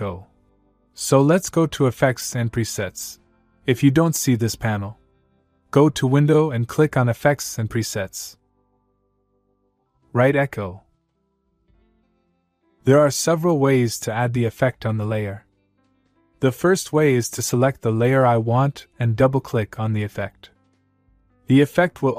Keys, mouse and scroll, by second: 1.7 click, 9.8 click, 10.8-12.4 typing, 13.3 click, 16.0 click, 20.7 click.